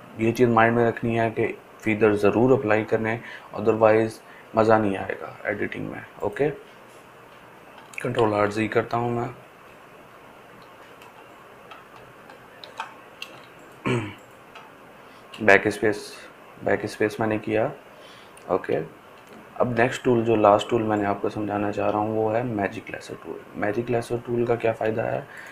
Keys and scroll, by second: 8.2 ctrl+alt+z, 8.8 ctrl+alt+z, 9.2 ctrl+alt+z, 12.5 ctrl+d.